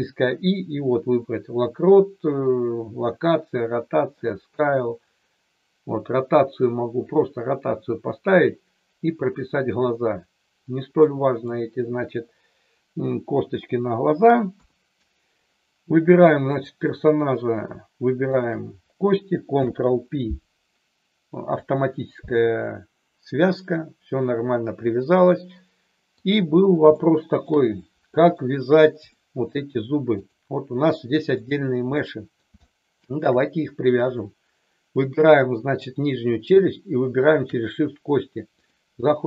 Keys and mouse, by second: 11.0 middle click, 14.5 KP_3, 16.3 click, 18.2 shift+click, 19.5 ctrl+p, 25.3-26.2 middle drag, 26.9 shift+middle click, 27.7 middle click, 29.1 middle click, 30.2 click, 32.0 middle click, 32.6 shift+middle click, 37.2 shift+click, 38.5 click.